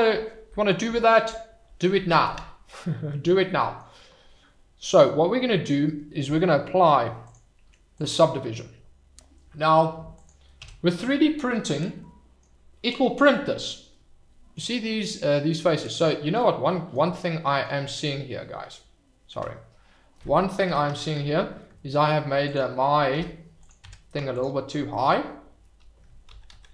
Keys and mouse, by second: 3.6 middle click, 7.2-9.0 drag, 10.6 h, 11.9-12.3 drag, 13.3-13.8 middle drag, 13.9-14.5 middle drag, 16.4-16.9 middle drag, 20.6 alt+h, 23.1 h, 23.6 click, 23.8 Tab, 26.3 ctrl+z, 26.5 ctrl+z.